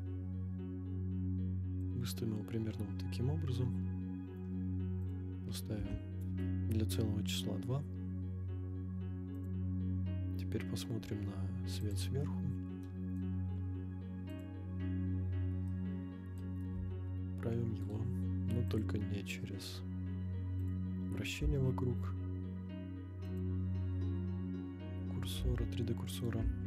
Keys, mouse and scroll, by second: 1.9 click, 2.4 scroll up 1, 3.7 scroll up 1, 5.0-6.4 drag, 7.4-8.0 scroll down 1, 9.3 click, 11.8 click, 12.8-13.2 middle drag, 13.4-13.8 scroll down 4, 14.3 click, 15.7-16.4 middle drag, 16.7 r, 16.9 x, 17.8 right click, 18.7-20.8 drag, 21.4 r, 23.4 click, 25.3 g, 25.4 x, 26.2 right click, 26.4 g, 26.5 y.